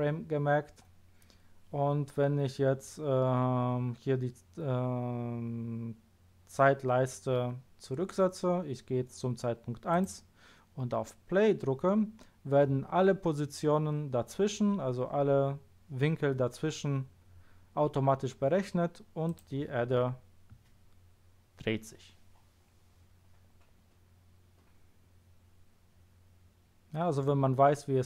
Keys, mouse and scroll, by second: 9.9 click, 19.2 click.